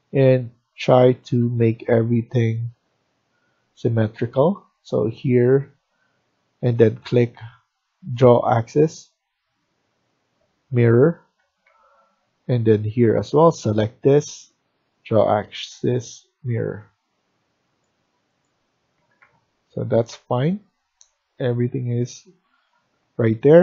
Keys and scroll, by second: 1.1 Escape, 1.3 Escape, 1.5 Escape, 11.3 Escape, 11.5 Escape, 11.7 Escape, 18.9 Escape, 19.1 Escape.